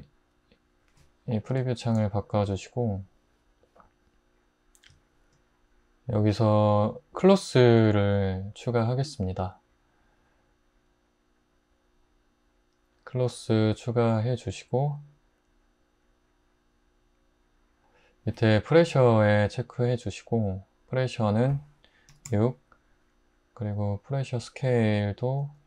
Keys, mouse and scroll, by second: 22.1 6, 22.3 Return, 24.6-25.6 typing.